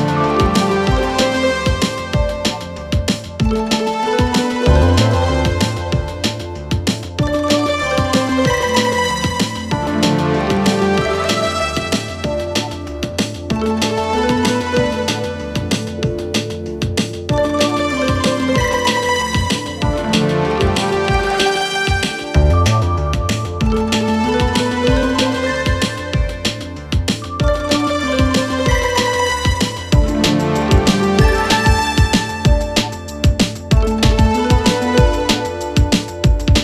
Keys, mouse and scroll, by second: 0.9-1.8 alt+scroll up 2, 1.8-2.4 alt+scroll up 1, 2.4-3.7 alt+scroll up 1, 4.0-4.9 alt+scroll up 2, 4.9 click, 9.0 click, 11.9 click, 15.9 click, 24.4 click, 27.4 click, 28.9 BackSpace, 32.8 click, 35.7-36.2 drag.